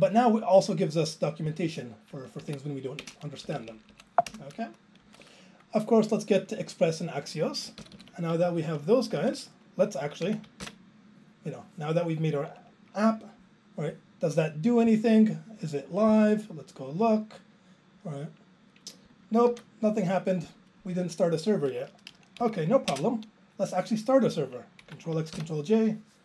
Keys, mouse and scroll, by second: 1.5 click, 2.4 Right, 3.0 ctrl+space, 3.4-3.9 Up, 4.3 BackSpace, 5.0 Delete, 7.8 ctrl+k, 7.9 ctrl+k, 9.2 Delete, 10.8 ctrl+j, 22.4 Down, 22.9 alt+space, 25.7 ctrl+j.